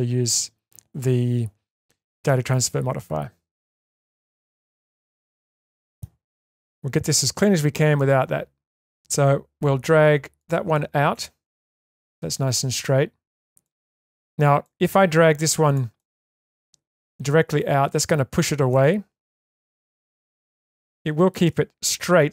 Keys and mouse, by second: 3.7 middle click, 5.3 middle click, 7.2 g, 10.7-12.8 middle drag, 13.7 shift+middle click, 14.6 middle click, 15.9-17.0 middle drag, 17.6 click, 18.7-21.3 middle drag.